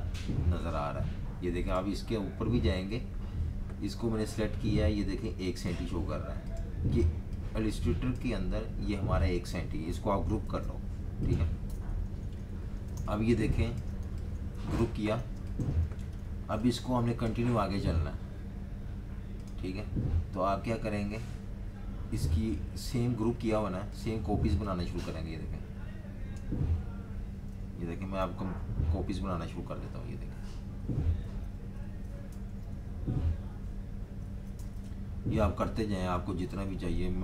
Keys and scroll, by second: 10.4 super+g, 11.7 super+-, 11.8 super+-, 12.0 super+-, 12.2 super+-, 12.3 super+-, 12.9-17.8 typing, 27.6 super+-, 27.8 super+-, 28.3 super+-, 29.4 super+d, 29.7 super+d, 29.9 super+d, 30.8 super+d, 31.0 super+d, 31.2 super+d, 31.6 super+d, 31.8 super+d, 32.3 super+-, 32.4 super+-, 32.7 super+d, 33.1 super+d, 33.3 super+d, 33.5 super+d, 34.3 super+d, 34.6 super+-, 34.7 super+-, 34.9 super+d, 35.4 super+d, 35.5 super+d, 35.5 super+d, 35.6 super+d.